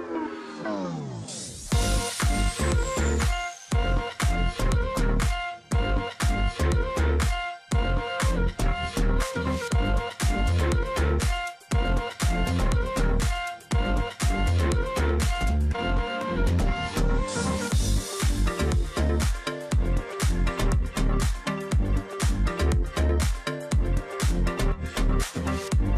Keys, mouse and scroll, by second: 0.4 space, 0.8-1.5 alt+scroll up 1, 1.8 ctrl+z, 4.8 ctrl+click, 5.6 ctrl+click, 6.3-6.7 alt+scroll down 1, 6.7 space, 7.0 alt+scroll down 1, 7.2 space, 7.6 alt+scroll up 1, 8.8 space, 9.1-9.7 alt+scroll up 1, 11.5 ctrl+click, 11.9 ctrl+space, 13.5 ctrl+click, 14.1-14.7 alt+scroll down 1, 15.0-15.4 alt+scroll down 1, 15.4 space, 17.8-18.3 alt+scroll up 1, 18.3 alt+scroll down 1, 18.5 space, 23.6 ctrl+c.